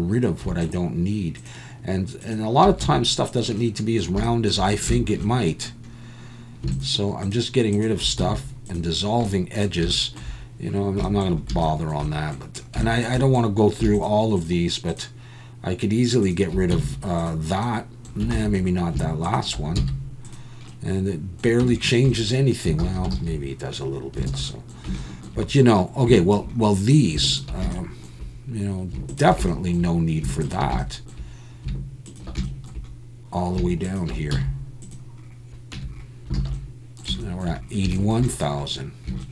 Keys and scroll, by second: 2.8 x, 8.2 x, 16.7 x, 18.4 ctrl+z, 19.8 x, 21.6 Tab, 22.9 ctrl+z, 23.2 ctrl+z, 24.3 alt+a, 34.3 x, 35.8 Tab, 36.4 alt+a.